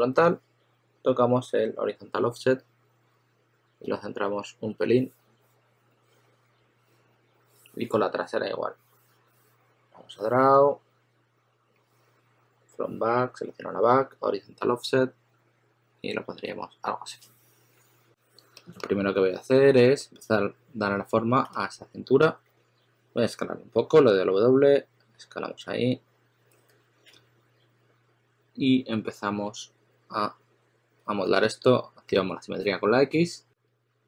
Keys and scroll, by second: 18.0 s, 19.9 s, 21.4 s, 22.4 w, 26.6-27.0 typing, 31.1 typing.